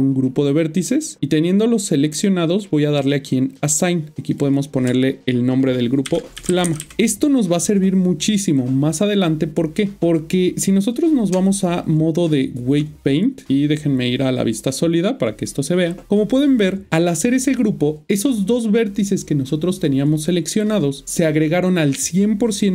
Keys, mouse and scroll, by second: 0.4 click, 3.5 click, 4.4 double click, 6.4 typing, 6.9 Return, 11.3-12.5 Tab, 14.5 click.